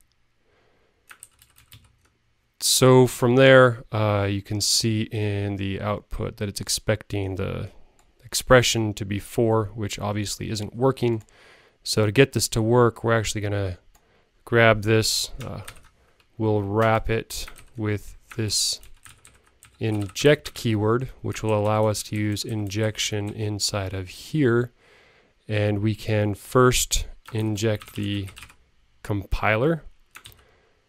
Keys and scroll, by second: 0.7 super+Right, 15.6 alt+super+t.